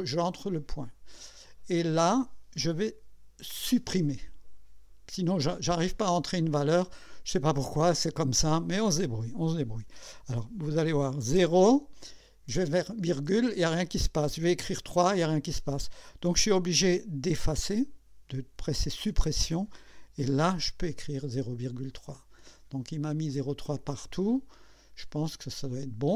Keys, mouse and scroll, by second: 0.3 click, 3.6 Delete, 11.4 0, 13.2 ,, 19.0 Delete, 25.2 click.